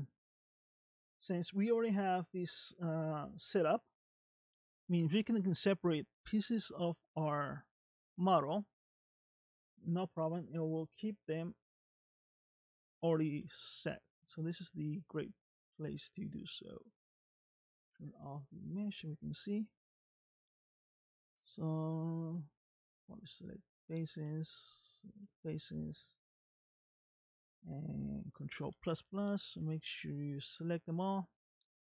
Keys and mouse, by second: 0.5 click, 6.6 ctrl+Tab, 8.6-9.8 middle drag, 11.8 click, 13.5 Tab, 14.1 shift+middle click, 15.5 middle click, 18.7 click, 19.7 click, 20.1 click, 22.6 click, 23.3 click, 25.0 shift+click, 28.6 ctrl+KP_Add, 30.6 middle click.